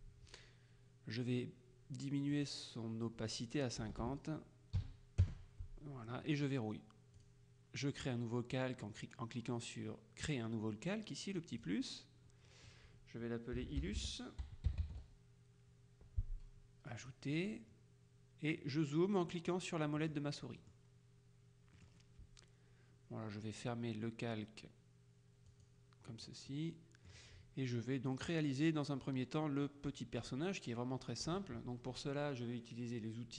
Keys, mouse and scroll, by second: 2.4 click, 3.9 BackSpace, 4.9 KP_5, 5.3 KP_Enter, 7.2 click, 11.6 click, 13.6-15.4 typing, 17.1 click, 20.0 click, 21.8 click, 25.6 click, 26.6-27.7 middle drag, 29.8-30.9 middle drag.